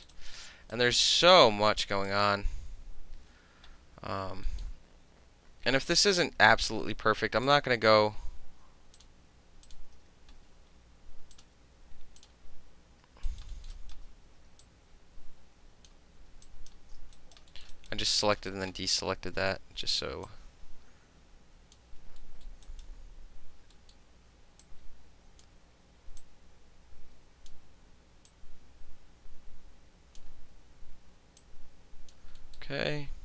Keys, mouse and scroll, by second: 0.1 alt+middle click, 0.1 alt+right click, 0.3 alt+middle click, 0.7 alt+right click, 1.0-2.1 alt+middle drag, 2.1 alt+click, 2.2-3.5 alt+middle drag, 4.5 alt+middle click, 5.9-6.7 drag, 7.5 shift+click, 9.0 shift+click, 9.7 shift+click, 11.3 click, 11.4-12.2 middle drag, 12.2 click, 12.3-13.3 middle drag, 13.3 alt+click, 13.4 alt+middle click, 13.7 alt+middle click, 13.7 alt+right click, 14.6-15.9 drag, 16.5 shift+drag, 17.2 alt+right click, 17.5 alt+middle click, 17.6 alt+middle click, 17.7 alt+right click, 17.9 alt+middle click, 18.4 alt+middle click, 18.5 alt+right click, 18.7-20.3 alt+middle drag, 20.3-21.8 alt+drag, 21.8 alt+middle click, 22.2 alt+middle click, 22.7 alt+right click, 23.7 alt+middle click, 24.6-25.4 drag, 26.2-27.5 drag, 28.3-30.2 drag, 31.4 click, 32.4 alt+middle click.